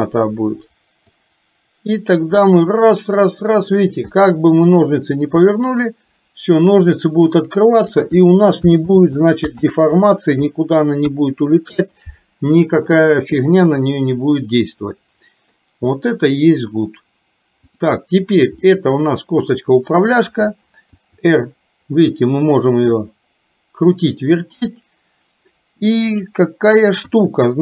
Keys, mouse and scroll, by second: 1.2-4.1 drag, 4.1 middle click, 5.6-8.0 drag, 8.9 ctrl+z, 9.7 ctrl+z, 11.1 KP_1, 14.5-15.6 middle drag, 17.7 click, 18.7-20.2 middle drag, 21.0 r, 27.1 KP_1.